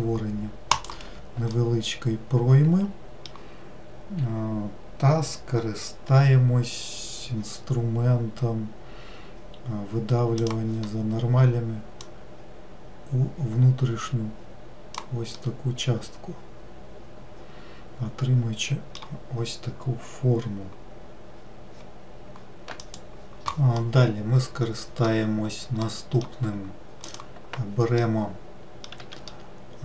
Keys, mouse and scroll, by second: 1.6-4.7 middle drag, 10.4-12.4 drag, 15.4-18.6 middle drag, 24.0-27.2 middle drag, 27.2 click, 28.2 middle click, 29.1 w, 29.4-29.8 middle drag.